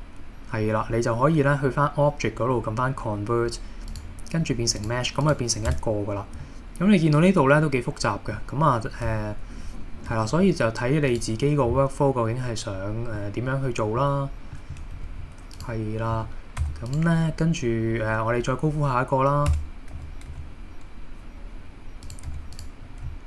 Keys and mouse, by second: 4.8 click, 5.2 click, 5.7 Tab, 6.4-8.4 middle drag, 9.1 a, 10.2 KP_1, 13.2-14.1 middle drag, 14.6 middle click, 14.9 KP_1, 16.2 a, 16.6 x, 19.5 Tab, 19.9 d, 20.3 x, 22.1 click, 22.3 x.